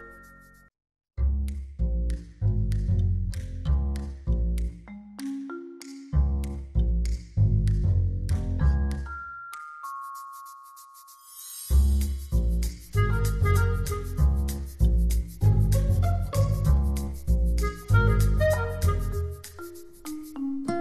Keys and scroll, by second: 10.6 space, 13.0 space, 17.1 space, 19.5 space.